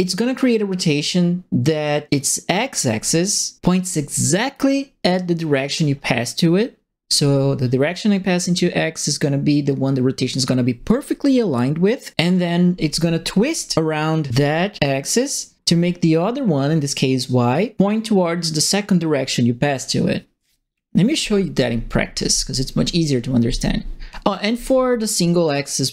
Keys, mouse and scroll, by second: 24.3 right click.